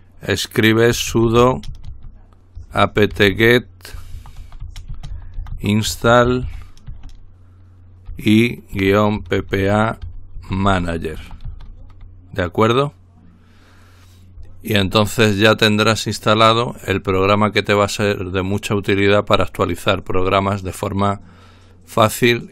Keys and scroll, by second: 0.7-6.9 typing, 8.1-12.3 typing.